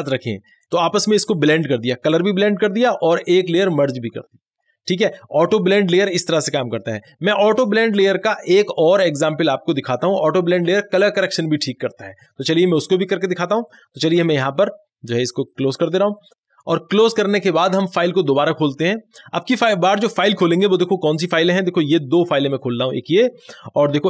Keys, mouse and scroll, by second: 14.0 click, 14.0 click, 18.4 click, 18.4 click.